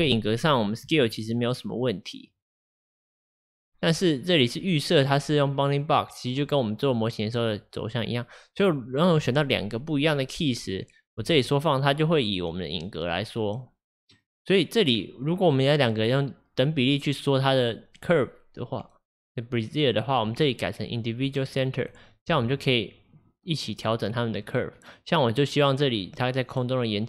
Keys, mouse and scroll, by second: 0.1-0.9 drag, 0.9 s, 2.8-8.0 drag, 8.7 click, 8.8-11.3 drag, 11.3 s, 20.3-22.4 drag, 22.4 s.